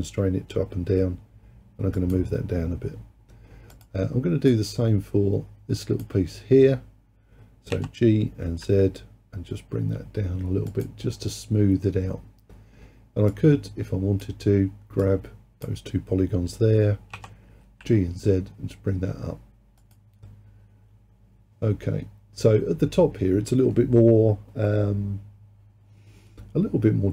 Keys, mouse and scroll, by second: 3.8 click, 4.5 click, 7.8 g, 13.3 click, 15.0 click, 17.2 g.